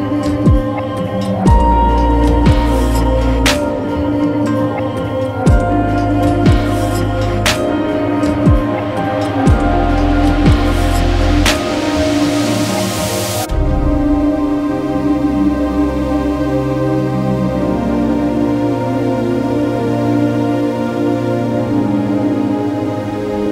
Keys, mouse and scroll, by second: 1.7-2.6 scroll, 2.6-5.2 scroll down 1, 5.2 scroll up 1, 6.7 l, 7.4 x, 9.6 click, 14.6 click, 14.8 Escape, 15.3 click, 17.4-19.9 typing, 18.6 click, 19.9 Return, 20.4 Escape, 21.0 l, 21.5 x, 22.4 click.